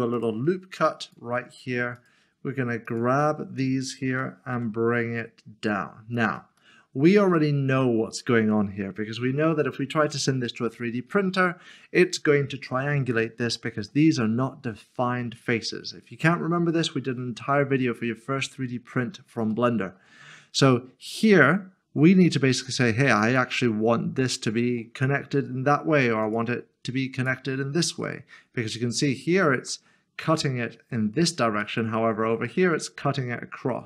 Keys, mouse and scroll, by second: 0.0 ctrl+r, 0.1 click, 1.9 right click, 2.8 shift+click, 4.1-4.5 typing, 6.1 click, 6.6 middle click, 13.5 middle click, 19.5 middle click, 23.3 click, 26.3 click, 27.1 shift+click, 28.0 middle click.